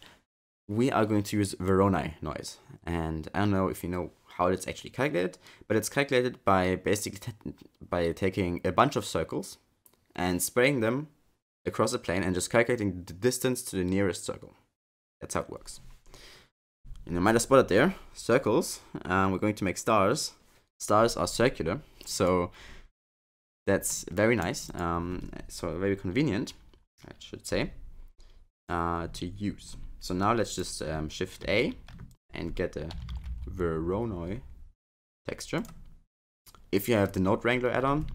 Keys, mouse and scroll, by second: 22.1 click, 23.2-23.9 scroll down 4, 23.9 middle click, 24.6 click, 28.6 click, 30.5 click, 31.4 shift+a, 36.7 click.